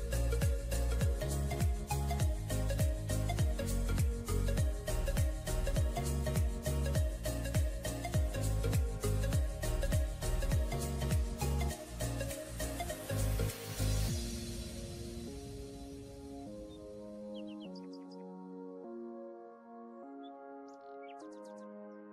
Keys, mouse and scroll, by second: 0.0-1.3 typing, 6.9 typing, 14.2 scroll down 1, 14.6 typing, 18.1-18.8 typing.